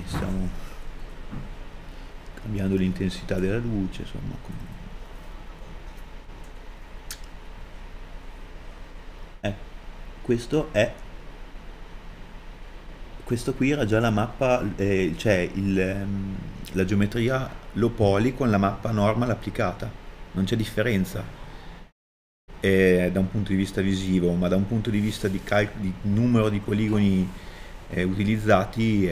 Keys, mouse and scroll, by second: 6.9-29.1 middle drag.